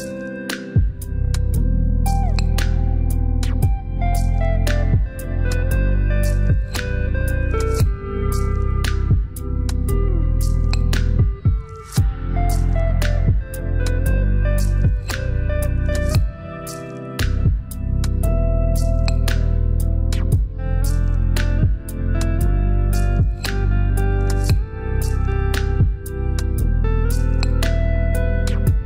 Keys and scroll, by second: 12.5 shift+=, 14.6 shift+=, 20.5 shift+=.